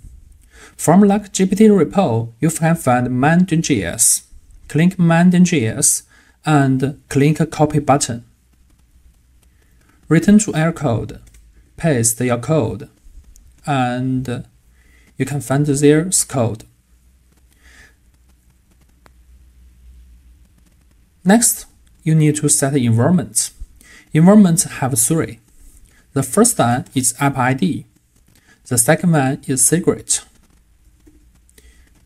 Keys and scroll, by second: 10.8 super+a, 11.6 super+v.